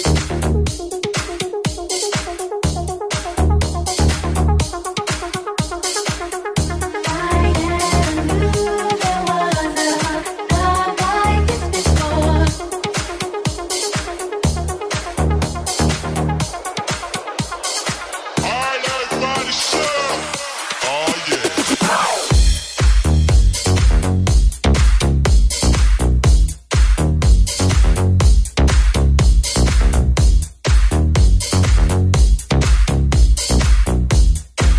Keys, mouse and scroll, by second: 4.5 right click, 4.6-12.5 middle drag, 5.2 g, 8.6 g, 12.5 right click, 12.5-16.3 middle drag, 16.3 shift+right click, 16.4 shift+middle click, 16.6 shift+right click, 16.7-18.6 shift+middle drag, 17.1 g, 18.6 right click, 18.6-20.9 shift+middle drag, 20.9 right click, 21.0-23.7 middle drag, 21.2 g, 24.2-25.3 middle drag, 25.3 right click, 25.3-28.2 middle drag, 28.0 a, 28.2 click, 28.2-34.7 middle drag.